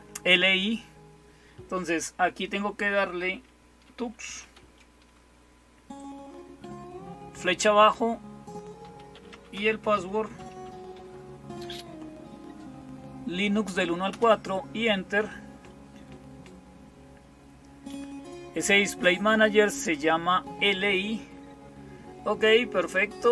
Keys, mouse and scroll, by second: 22.7 click.